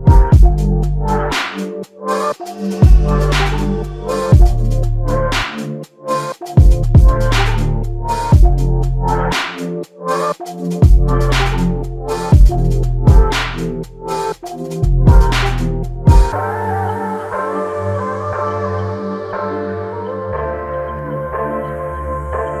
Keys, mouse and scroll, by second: 0.3 Return, 1.3 Return, 3.8 Return, 7.7 alt+click, 18.1 ctrl+right click, 20.9 ctrl+right click, 22.1 ctrl+right click.